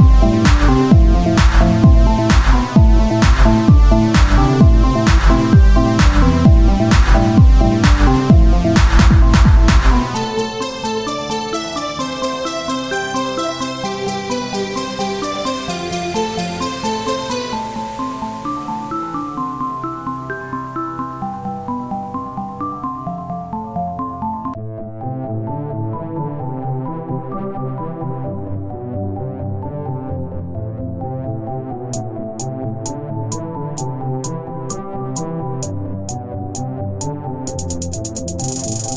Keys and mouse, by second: 8.3 click, 8.8 KP_3, 10.9-12.0 drag, 11.0 r, 12.0 KP_1, 12.2-13.4 drag, 13.4 s, 14.4 click, 15.0 right click, 18.5 ctrl+z, 19.9 ctrl+a, 21.0 t, 24.2 ctrl+z, 24.9 t, 26.2-32.1 drag, 26.2 z, 32.1 ctrl+z, 32.9-34.2 drag, 35.4-38.8 middle drag, 38.8 Tab.